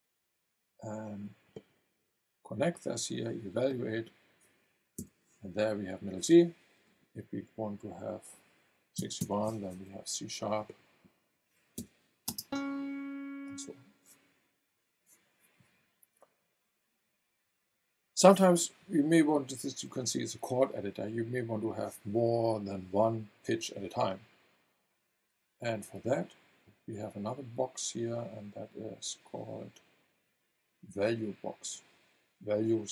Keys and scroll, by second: 5.0 v, 9.0 KP_6, 9.2 KP_1, 9.7 Return, 11.8 v, 12.2 space.